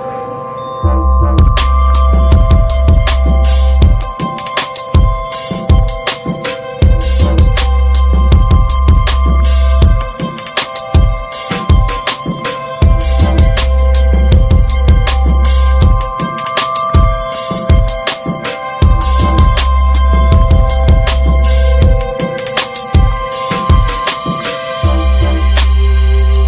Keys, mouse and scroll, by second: 1.9 ctrl+s, 2.7 click, 3.1-3.4 scroll down 7, 5.3 click, 6.8 middle click, 6.9 scroll up 2, 8.6 click, 11.8 click, 13.1-16.4 middle drag, 16.4 click, 19.1 click, 20.8 click, 20.9 scroll down 4, 21.1 middle click, 21.3 scroll up 3, 21.6-23.4 middle drag, 23.4 click, 23.6 scroll down 1, 23.8 middle click, 24.2 ctrl+s, 24.3-24.6 scroll down 1, 24.6-25.5 shift+middle drag, 25.5-26.3 scroll up 3, 25.7 middle drag, 26.0 shift+middle click, 26.3 click.